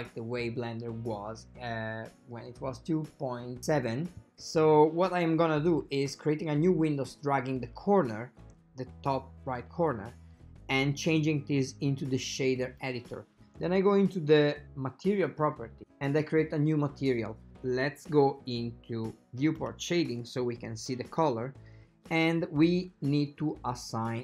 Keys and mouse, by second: 0.0 click, 4.8-5.9 drag, 7.1-10.0 drag, 11.2-12.9 drag, 14.4 click, 16.4 click, 19.7 click, 22.8 shift+middle drag.